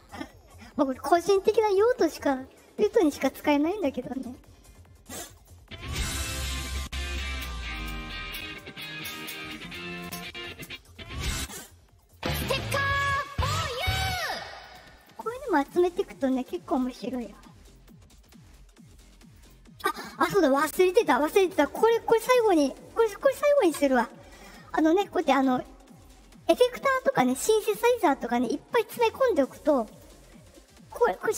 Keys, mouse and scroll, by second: 5.3 click, 10.6 click, 11.3 click, 11.9 click, 14.5 click, 15.6 click, 16.6 click, 17.7 click, 18.1 click, 19.3 click, 24.6 click, 25.8 right click, 26.7 click, 29.8 click.